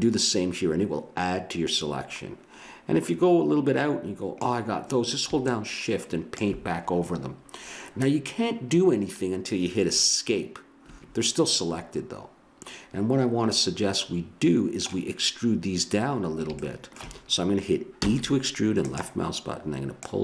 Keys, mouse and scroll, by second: 11.5-13.4 middle drag, 16.2-18.8 middle drag, 18.0 e, 19.9-20.2 drag.